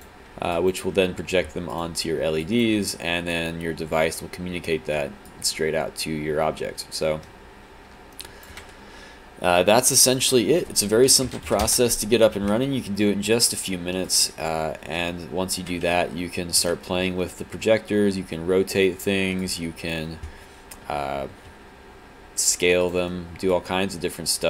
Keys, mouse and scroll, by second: 0.6 alt+click, 2.4 alt+click, 5.3 alt+click, 11.7 Return, 13.4 alt+click, 14.1 click, 15.6 e, 16.7 z, 19.5 click, 21.5 e, 22.9 click, 23.5 alt+click.